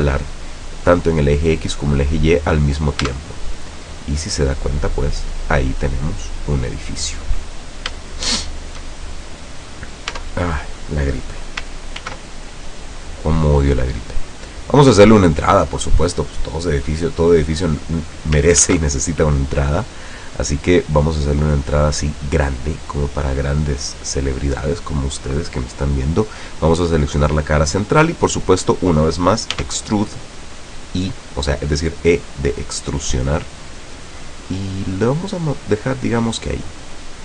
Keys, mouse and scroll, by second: 3.1 Tab, 3.9-5.1 middle drag, 5.1-5.6 scroll up 4, 5.6-7.5 middle drag, 7.7 scroll up 2, 8.1-9.1 shift+middle drag, 9.1-9.4 shift+scroll up 1, 10.2 Tab, 12.1 ctrl+r, 14.6 scroll up 1, 16.1 click, 17.3 click, 18.8 ctrl+r, 19.3 ctrl+click, 21.9 click, 23.4 click, 24.1 right click, 28.2 middle click, 29.6 e.